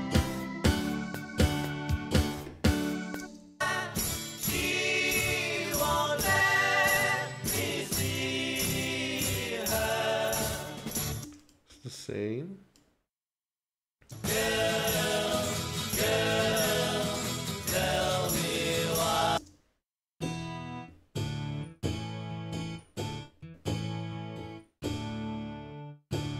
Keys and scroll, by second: 3.2 space, 5.0 ctrl+Right, 11.3 space, 14.1 space, 19.4 space.